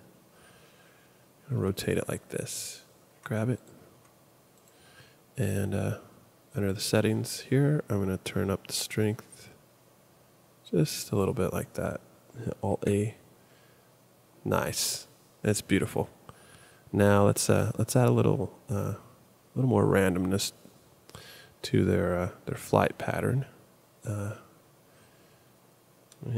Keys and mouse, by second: 1.5 r, 3.1 g, 3.9 r, 12.7 alt+a.